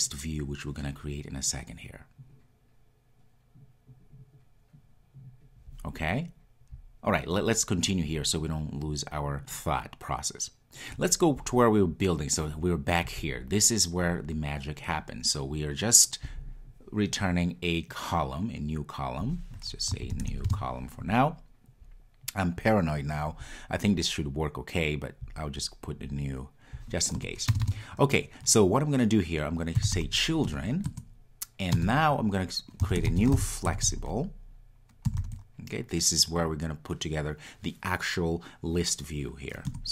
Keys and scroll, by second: 30.5 Return, 39.7 Return.